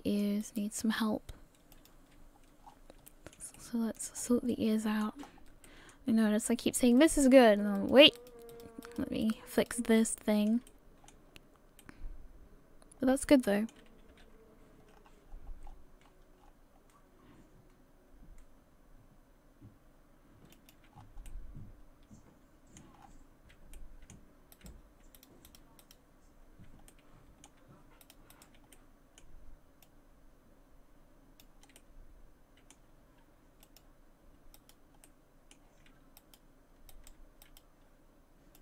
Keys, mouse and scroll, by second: 0.4 right click.